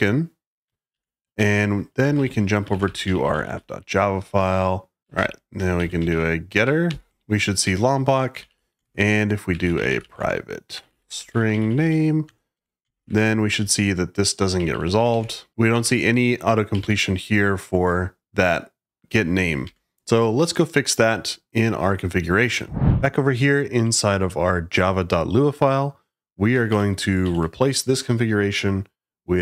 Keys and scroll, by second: 0.8 ctrl+d, 1.3 Return, 1.8-6.5 typing, 6.8 ctrl+y, 7.5 Escape, 8.0-17.1 typing, 19.5 Escape, 26.6 shift+v, 27.2 shift+g.